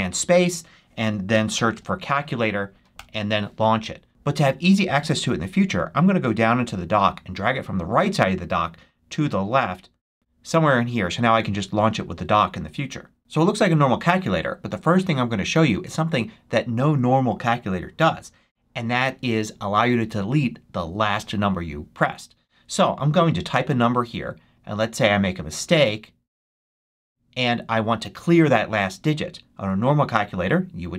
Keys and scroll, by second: 0.9-2.1 typing, 2.8 Return.